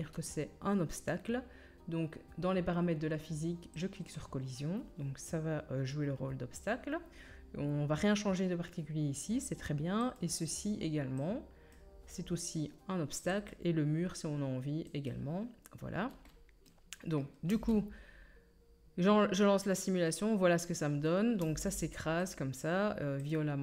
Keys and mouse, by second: 10.2-11.2 right drag, 13.5-15.1 right drag, 15.1-16.9 middle drag, 17.5 space, 20.7-23.3 drag, 20.7-23.3 middle drag, 20.7-23.6 right drag, 21.4 space.